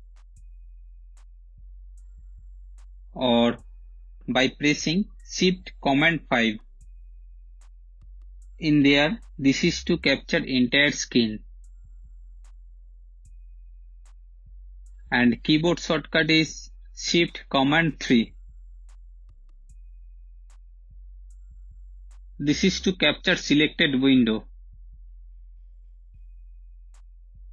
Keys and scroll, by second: 5.4 shift+super+5, 16.1 shift+super+3, 20.4 shift+super+5, 24.7 Return, 24.7-25.7 typing.